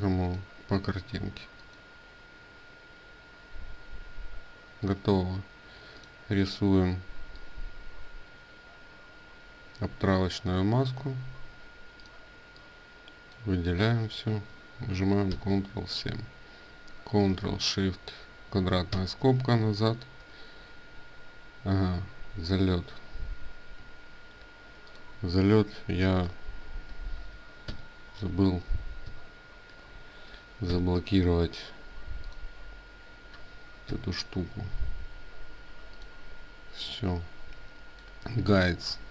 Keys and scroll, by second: 15.4 ctrl+7, 21.5 ctrl+z, 22.2 ctrl+z, 22.7 ctrl+z.